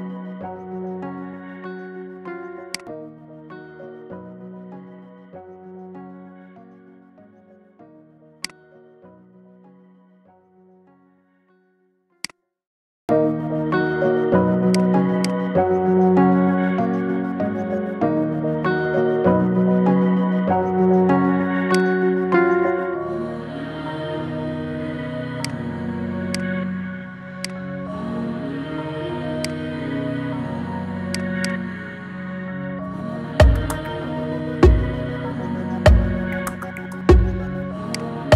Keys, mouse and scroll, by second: 0.2-1.1 middle drag, 1.1 Tab, 2.5 click, 3.6 KP_3, 4.1-5.1 scroll down 3, 5.1 e, 8.6-10.1 middle drag, 10.1 g, 12.6 g, 15.1 click, 16.4 ctrl+b, 22.1 middle click, 22.5-23.0 scroll up 5, 23.0 middle click, 23.7-24.2 scroll up 3, 24.2 shift+middle click, 24.9 Tab, 25.3-27.3 right drag, 27.3 click, 27.7-28.1 scroll down 5, 28.1-29.2 middle drag, 29.2 click, 29.7 s, 31.2 click, 31.6-32.3 middle drag, 32.3-32.7 scroll up 6, 32.7-34.9 middle drag, 34.9-37.8 scroll up 1, 37.8 click.